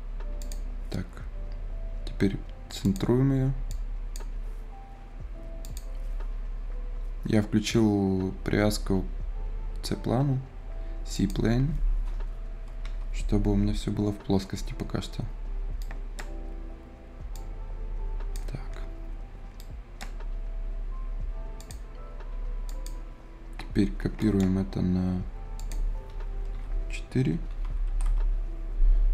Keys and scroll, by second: 12.5 Return, 12.9 Return, 26.3 Return, 26.5 Return, 27.3 d, 27.7 Return.